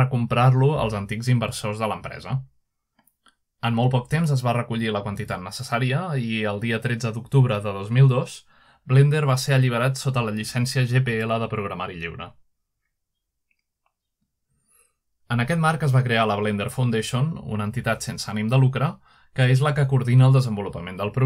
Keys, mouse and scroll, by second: 0.0-9.4 drag, 9.4-11.9 scroll down 1, 11.9-15.0 drag, 15.0-18.0 scroll down 1, 18.0 ctrl+Tab, 19.3-19.6 ctrl+drag, 20.1-21.2 scroll up 2.